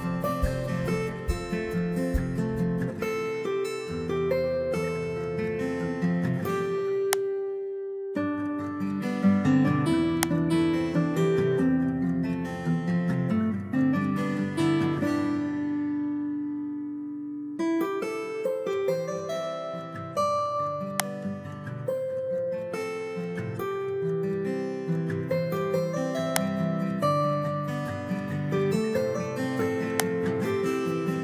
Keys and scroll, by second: 3.6 Return, 9.1 ctrl+c, 11.0 ctrl+v, 12.5 Return, 13.6 ctrl+v, 14.0 Return, 14.9 ctrl+v, 15.3 Return, 16.1 ctrl+v, 28.6 ctrl+c.